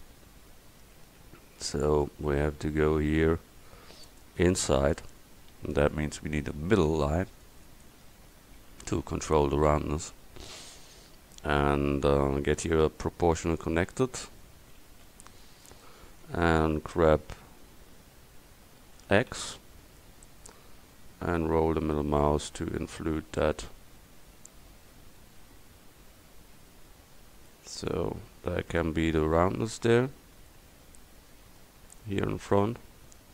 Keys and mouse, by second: 6.9 ctrl+r, 9.8 a, 12.5-14.9 middle drag, 14.9 c, 15.9-17.7 drag, 19.0 g, 29.5-33.3 middle drag.